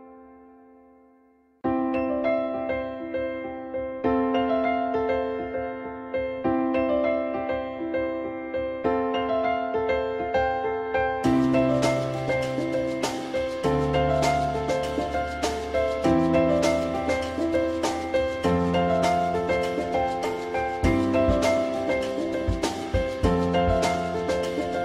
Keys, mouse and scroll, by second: 7.0 alt+middle click, 15.7 ctrl+click, 16.9-17.3 typing, 19.2-21.3 drag, 20.2 w.